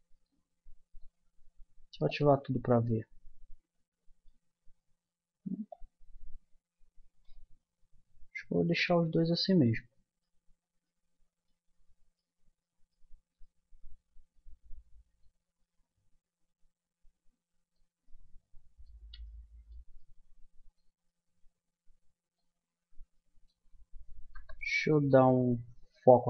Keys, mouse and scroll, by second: 0.1-2.7 drag, 2.7-4.0 middle drag, 5.7-7.2 drag, 7.6-8.6 middle drag, 9.4 middle click, 17.3 middle click, 18.0-21.3 middle drag, 24.4 KP_0.